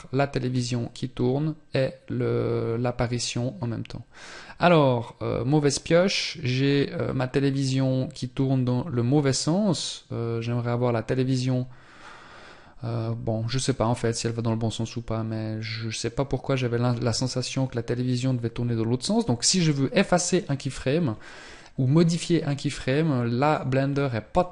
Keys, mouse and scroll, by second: 20.8-22.0 scroll up 1, 22.0 middle click, 23.2 scroll up 1, 23.9 scroll up 2.